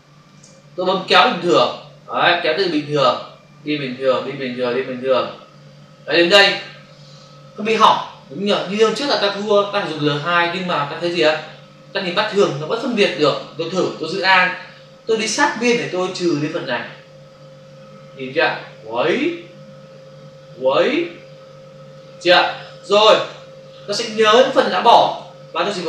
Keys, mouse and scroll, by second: 0.9 click, 2.8 click, 15.4 alt+click, 22.7 ctrl+click, 23.6 click.